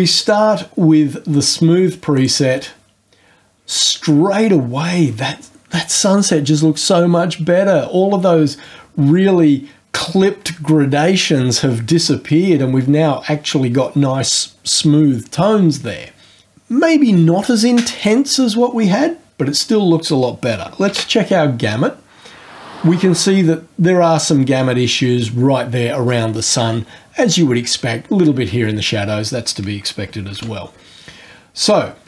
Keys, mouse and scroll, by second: 0.2 click, 2.1 click, 20.9 ctrl+g, 30.3 ctrl+g.